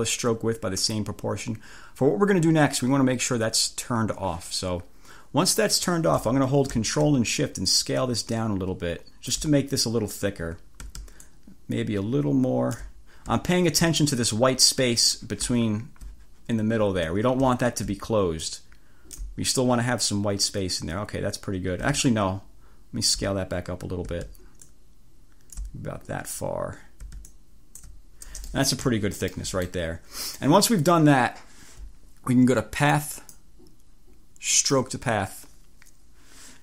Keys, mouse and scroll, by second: 7.7-9.6 ctrl+shift+drag, 11.3-13.1 ctrl+shift+drag, 13.6-14.0 ctrl+scroll up 2, 15.7-16.1 ctrl+scroll down 2, 18.5 ctrl+shift+click, 22.1-23.5 ctrl+shift+drag, 24.7-25.9 drag, 27.4 click, 28.5 click, 28.9 1, 29.4 click, 32.8 click, 33.3 click, 34.5 click.